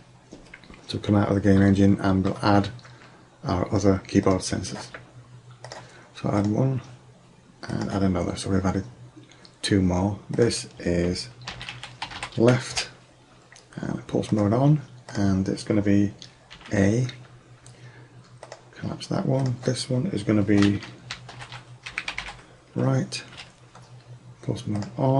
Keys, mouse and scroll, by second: 1.7-3.5 middle drag, 4.3-6.1 drag, 6.5-8.4 drag, 10.4-12.3 drag, 14.4-17.0 drag, 18.5-21.3 drag, 24.9-25.1 drag.